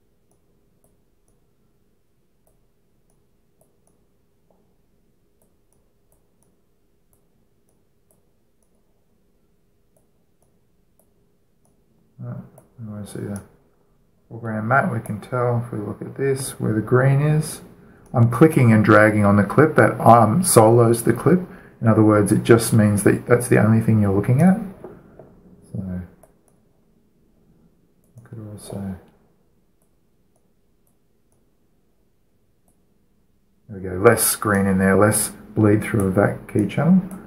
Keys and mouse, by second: 10.7-17.6 drag, 18.8-21.1 drag, 25.1-28.7 drag, 28.7-30.5 right drag, 30.5-35.1 drag, 35.1 middle click, 35.3-37.2 drag.